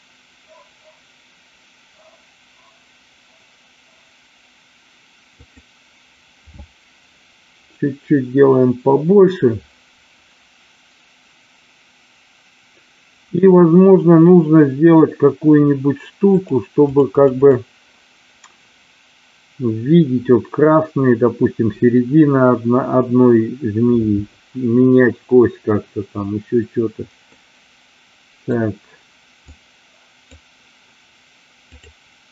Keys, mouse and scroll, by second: 5.3-11.7 drag, 16.3-24.7 drag, 27.3-28.4 middle drag, 29.4-30.4 drag, 31.7 click.